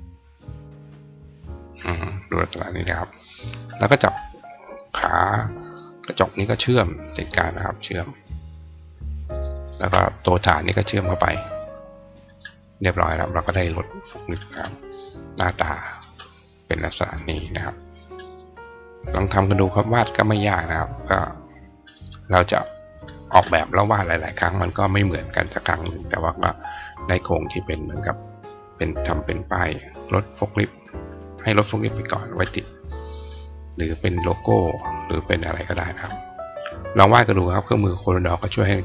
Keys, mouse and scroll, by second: 2.5 click, 3.3 click, 3.8 shift+click, 4.6 shift+click, 8.6 click, 9.5 shift+click, 11.4 click, 12.0 click, 14.0 click, 14.4 right click, 16.8 click, 17.8 click, 18.3 click, 19.1 click, 20.9 click, 21.8 click, 22.5 click, 23.0 click, 24.8 click, 25.3 click.